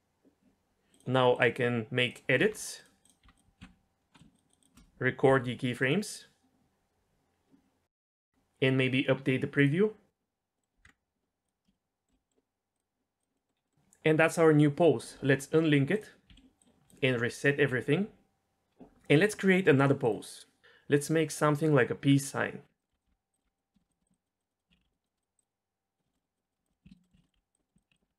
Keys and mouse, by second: 2.4 r, 3.2 r, 3.6 i, 4.1 middle drag, 4.6 shift+drag, 5.2 i, 10.8 KP_0, 11.4 click, 12.8 click, 13.2 click, 13.3 middle drag, 13.6-15.8 middle drag, 16.3 a, 16.6 drag, 17.3 alt+r, 20.0 drag, 22.6 r, 22.8 middle click, 23.0 r, 23.3 r, 23.4 middle click, 23.5 r, 23.7 shift+middle click, 23.9 click, 24.0 click, 24.7 ctrl+z, 25.2 click, 26.2 middle drag, 26.5 drag, 26.7 middle drag, 26.9 ctrl+shift+z, 27.0 middle drag, 27.3 r, 27.6 middle drag, 27.9 ctrl+z, 28.0 r.